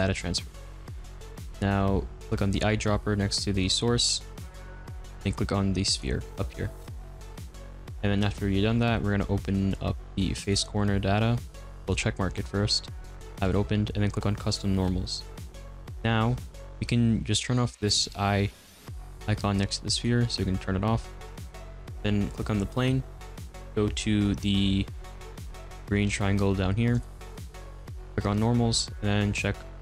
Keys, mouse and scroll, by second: 0.0-6.0 drag, 11.8 click, 14.4 click, 19.9 click, 21.2 click.